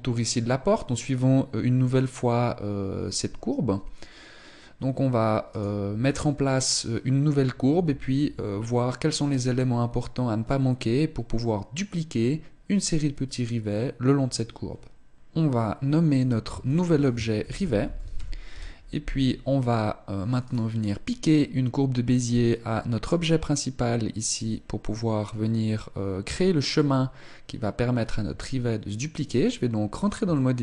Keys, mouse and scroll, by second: 5.2 right click, 6.3 right click, 18.2 ctrl+click, 20.1 right click, 27.9 Tab, 29.0-30.2 scroll up 4, 29.2 shift+middle click, 30.2 right click.